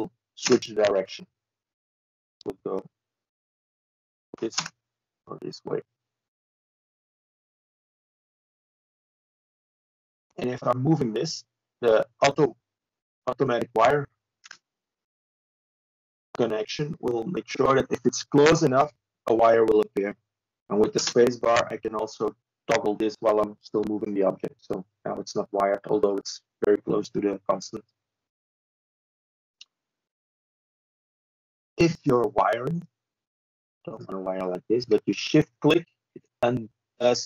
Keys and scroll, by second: 13.3 ctrl+z, 16.7 w, 18.2 w, 25.4 Escape, 26.9 Delete, 30.2 space, 31.4 space, 36.2 space.